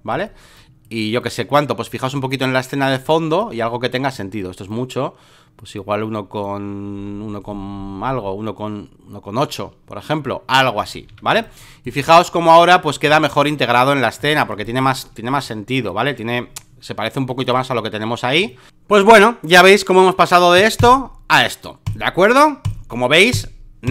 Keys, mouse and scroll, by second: 2.2 space, 2.3 click, 3.1 click, 4.1-7.0 drag, 7.0-10.8 middle drag, 10.8 click, 11.1 v, 11.3 space, 11.4 click, 11.8 click, 13.1 click, 13.5 click, 14.3 click, 14.6 click, 15.5 click, 17.3-18.4 drag, 18.4 space, 18.5 click, 18.7 Escape, 20.8 click, 21.8 click, 22.6 click, 23.3 click, 23.8 click.